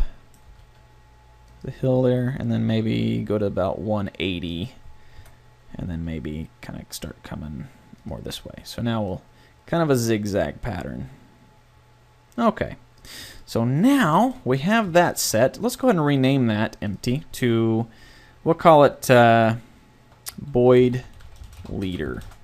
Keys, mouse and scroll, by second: 0.5 g, 1.7 middle click, 5.1 KP_7, 5.9 g, 8.1 click, 13.2 a, 15.0-18.5 middle drag.